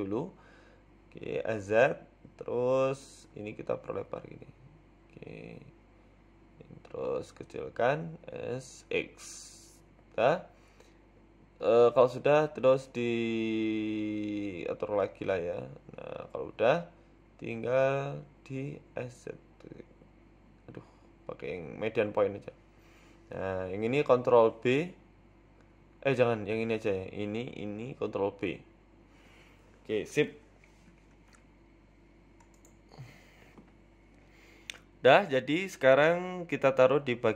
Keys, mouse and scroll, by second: 0.5 s, 4.2 click, 4.9 s, 7.7 l, 8.3 s, 9.5 s, 11.5 click, 12.2 shift+click, 13.9 s, 17.3 click, 17.8 shift+click, 19.6 s, 22.3 click, 23.2 s, 25.0 click, 25.8 ctrl+b, 28.6 click, 29.0 shift+click, 29.6 ctrl+b, 31.8 s, 32.7 ctrl+b, 34.1 Tab, 34.3 middle click, 34.8-35.4 scroll down 3, 35.2 middle click, 36.1 KP_1, 36.7 KP_7, 36.9 Tab.